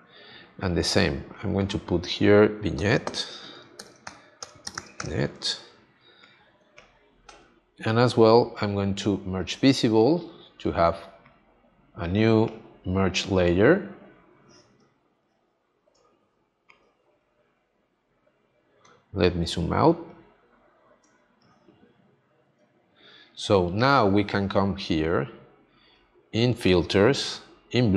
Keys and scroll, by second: 3.7 shift+v, 14.7 space, 21.0 space.